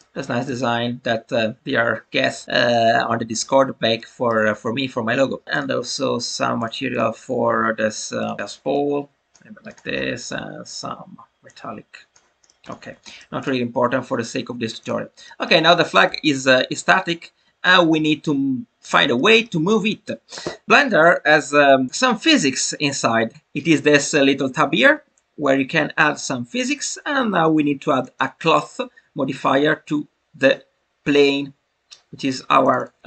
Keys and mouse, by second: 3.9-4.4 middle drag, 5.5-7.0 drag, 8.1 click, 9.6 click, 11.5 click, 12.4 middle click, 12.6-13.0 drag, 13.0 shift+middle click, 13.4-15.2 drag, 15.2 middle click, 16.0 n, 17.6-17.9 shift+middle drag, 19.1 shift+middle click, 21.9 click, 27.9 click, 32.7-33.0 drag.